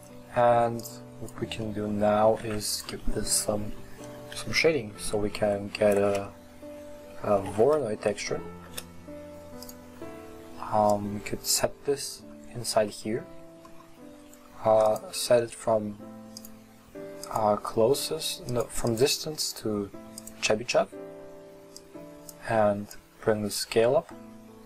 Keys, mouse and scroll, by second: 11.7 click, 12.5-17.4 scroll up 1, 20.4-24.6 drag.